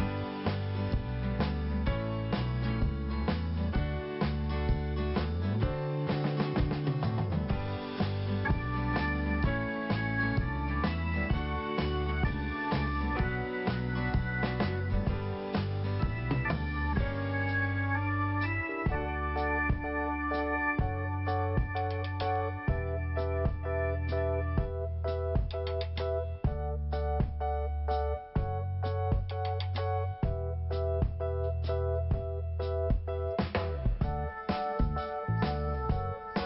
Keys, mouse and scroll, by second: 0.9 right click, 1.1 right click, 1.9 click, 2.2 click, 3.5 click, 5.3 p, 6.6 click, 11.4 click, 11.5 click, 12.7 click, 12.7 click, 13.5 click, 13.6 click, 15.4 click, 15.5 click, 16.0 click, 18.0 click, 19.1 p, 20.7 click, 24.7-25.0 scroll down 1, 25.3 scroll up 1, 26.5 click, 29.3 click, 31.6-32.0 scroll up 2, 32.0 click, 32.1 click, 32.1 click, 32.2 click, 33.3 scroll up 2, 34.5 click.